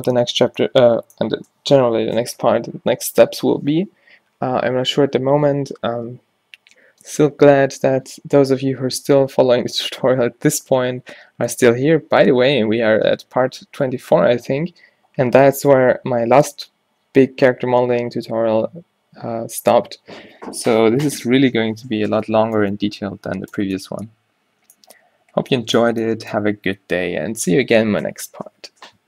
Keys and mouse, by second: 0.6-22.8 middle drag, 23.2 middle click, 25.4 middle click.